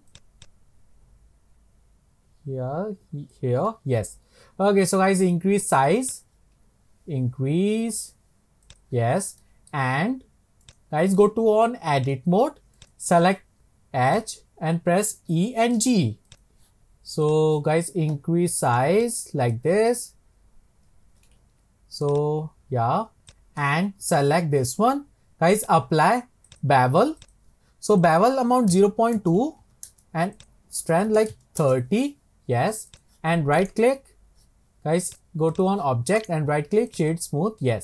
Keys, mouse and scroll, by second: 0.1 click, 0.4 click, 3.7-4.3 middle drag, 4.3 scroll down 4, 9.2 scroll down 3, 9.4-10.6 middle drag, 10.6-14.2 drag, 15.3 e, 17.3 click, 17.7-18.7 scroll down 2, 18.7 click, 19.0 click, 21.4 ctrl+z, 22.0 click, 23.3 click, 24.1 click, 25.6 click, 26.5-33.6 drag, 33.6-35.1 right drag, 35.1-36.2 drag, 36.2-37.8 right drag.